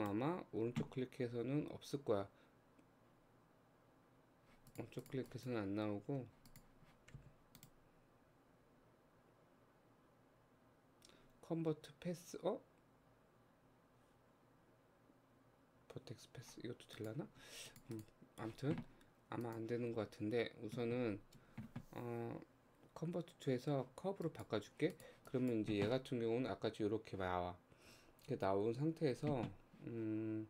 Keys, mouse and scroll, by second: 0.0-3.1 right drag, 4.7 click, 5.0 click, 5.3 click, 6.2 Tab, 6.5 click, 7.2 a, 7.6-10.7 right drag, 17.0 click, 17.4 Tab, 17.7 click, 18.0 click, 19.4-22.6 drag, 24.9 click, 27.7-28.0 scroll down 1, 28.3-29.4 scroll down 3.